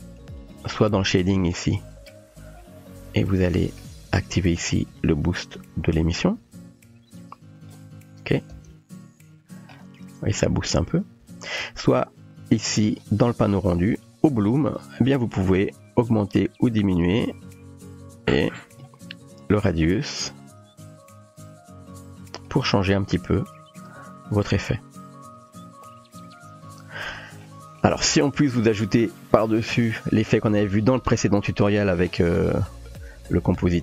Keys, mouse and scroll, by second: 1.4 middle click, 1.7 typing, 3.3 middle click, 4.9-7.7 drag, 8.5 space, 10.4-10.7 shift+middle drag, 12.7 click, 14.2 click, 15.8-18.8 drag, 19.7-22.5 drag, 24.0-27.0 drag, 28.1 space, 30.6 space, 31.8 ctrl+space, 33.0 space.